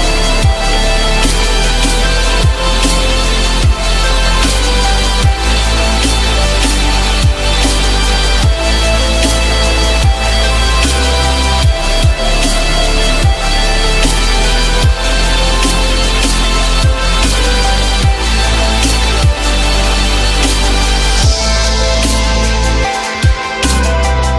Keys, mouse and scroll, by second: 7.5 alt+middle click, 7.9 typing, 17.4 alt+middle click, 17.5 alt+middle click, 18.3 alt+middle click, 19.2 F4, 20.9 z, 22.5 F4, 23.8 j.